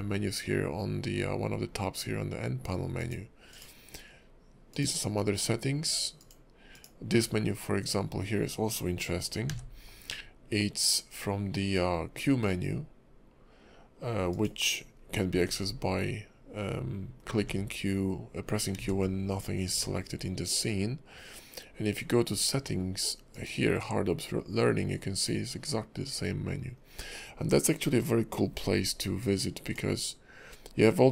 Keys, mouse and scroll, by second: 3.5 click, 4.7 click, 6.2 click, 6.7 click, 9.5 q, 14.3 click, 15.3 q, 17.3 q, 18.7 q, 19.7 q.